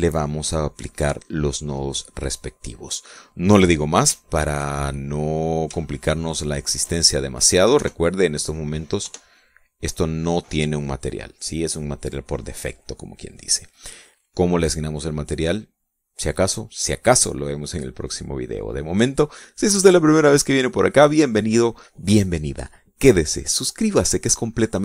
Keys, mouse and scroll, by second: 3.6 middle click, 4.9 shift+middle click, 5.6-7.2 shift+middle drag, 7.4 shift+middle click, 7.8 shift+middle click, 8.5 KP_0, 9.8 F12, 20.4 right click.